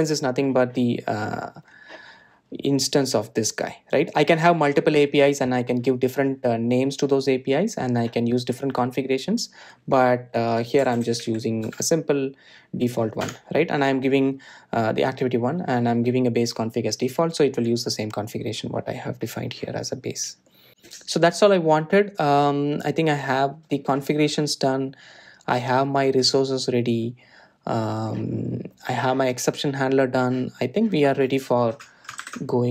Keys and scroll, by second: 1.2 Return, 13.2 Return, 14.7 Return, 18.7 Tab.